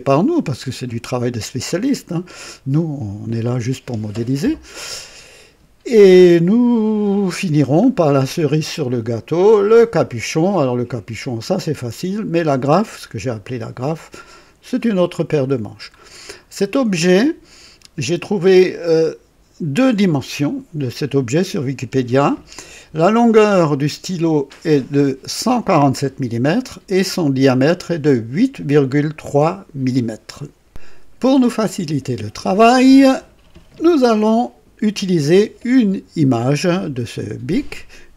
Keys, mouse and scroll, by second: 2.1-3.5 right drag, 7.4 scroll down 1, 8.0-8.8 right drag, 9.6 scroll down 1, 15.2-15.6 scroll down 1, 16.0 scroll down 1, 16.6-17.9 right drag, 18.1 scroll down 1, 18.7-19.7 right drag.